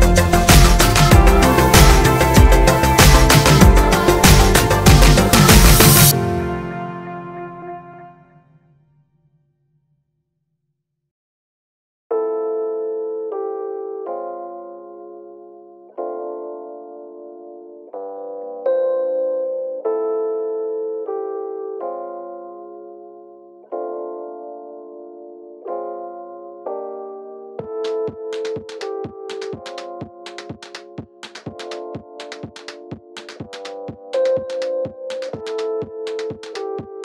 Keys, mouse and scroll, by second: 0.6-16.5 drag, 16.9-17.9 middle drag, 17.3-17.9 scroll down 1, 17.9 click, 20.8 shift+a, 29.5 Tab, 34.0-36.2 middle drag, 36.2 click, 36.5-37.0 shift+middle drag.